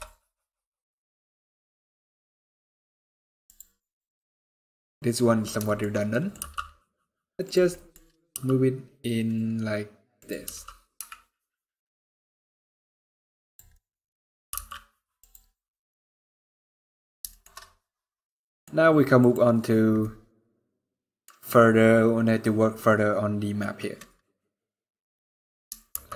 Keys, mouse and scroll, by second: 0.5-1.0 scroll up 7, 1.2-1.9 scroll down 5, 2.2 scroll down 2, 3.2 click, 3.5 scroll down 2, 3.7 middle click, 4.2 scroll down 2, 5.4 shift+middle click, 5.8 middle click, 6.1 g, 7.4 middle click, 7.7-8.2 scroll up 3, 8.0 g, 10.1 r, 13.4 middle click, 13.8-14.2 scroll up 3, 14.2 g, 15.2 scroll down 1, 15.2 middle click, 16.6 scroll down 2, 17.0 shift+middle click, 17.3 middle click, 18.3-18.6 scroll up 2, 18.9 click, 19.7 middle click, 21.3 scroll down 1, 23.3 middle click, 25.8 shift+h.